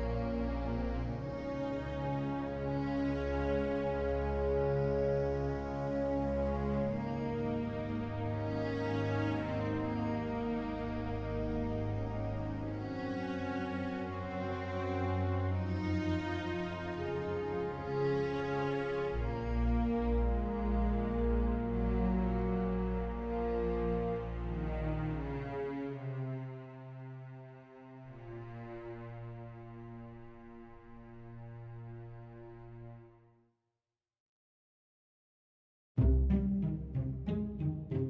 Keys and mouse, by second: 15.3 click, 15.3 z, 16.0 click, 16.4 shift+d, 18.7 shift+z, 27.6 KP_9, 30.0 KP_9, 33.5-38.0 middle drag.